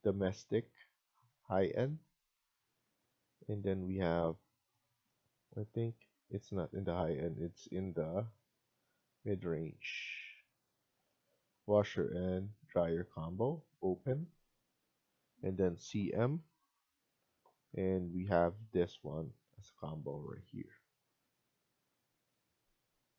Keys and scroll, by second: 17.0-17.8 typing.